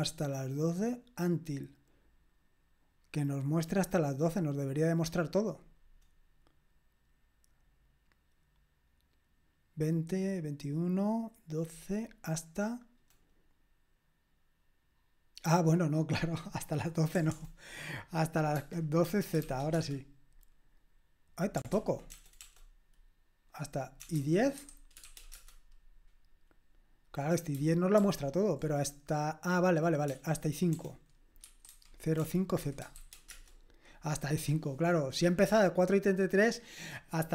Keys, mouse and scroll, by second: 17.1 BackSpace, 17.3 BackSpace, 19.2-20.0 typing, 21.7 ctrl+p, 22.1 BackSpace, 22.4 BackSpace, 23.9-25.5 typing, 27.9 ctrl+p, 30.0-33.3 typing.